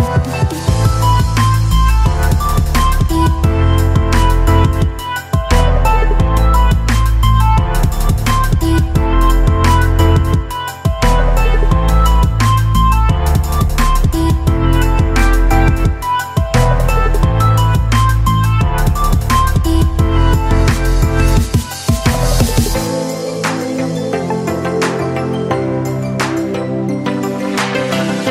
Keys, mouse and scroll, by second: 3.3-4.1 typing, 5.1-6.6 right drag, 6.6 Return, 6.8 >, 7.0 Return, 7.6 /, 7.7 Return, 9.0 right click, 9.7 /, 10.8 right click, 11.3 Tab, 14.1-16.1 typing, 18.6-20.9 right drag, 20.9-22.2 typing, 22.1 Right, 23.6 p, 24.4 x, 24.7 /, 26.1 Down, 26.5 t, 26.5 e, 26.7 x, 26.8 t, 27.4 Left, 27.9 Tab, 28.2 Right.